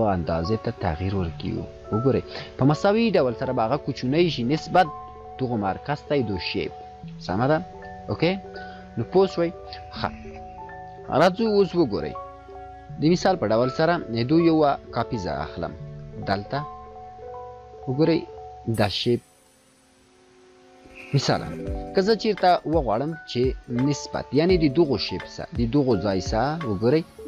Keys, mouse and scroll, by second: 13.9 ctrl+z, 15.0-16.9 alt+click, 20.4 click, 26.0 click.